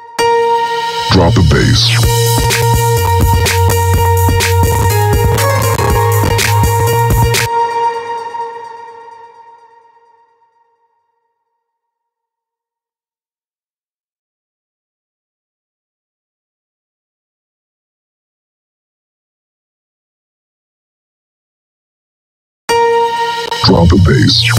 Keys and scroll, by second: 0.0 space, 6.9 space, 22.2 space.